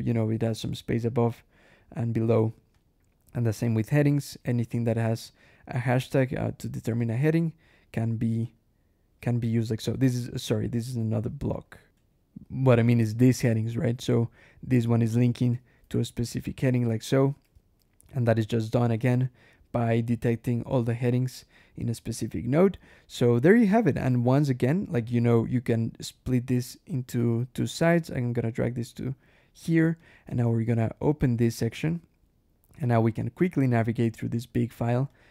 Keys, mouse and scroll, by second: 0.8 click, 2.6 click, 3.7 ctrl+click, 4.4 ctrl+e, 6.2 click, 7.0 ctrl+click, 8.3 click, 9.1 alt+space, 9.3 alt+h, 10.3 alt+click, 10.9 alt+Escape, 11.4 alt+click, 11.8 alt+\, 12.9 click, 15.5 ctrl+e, 16.3 ctrl+click, 17.0 click, 17.4 ctrl+e, 19.6 click, 21.5 scroll up 1, 23.9 click, 25.6-26.6 drag, 27.5-29.3 drag, 29.8 ctrl+click, 30.3 ctrl+shift+h, 31.7 scroll up 1, 32.7 click, 33.6 click, 34.2 click, 35.0 click.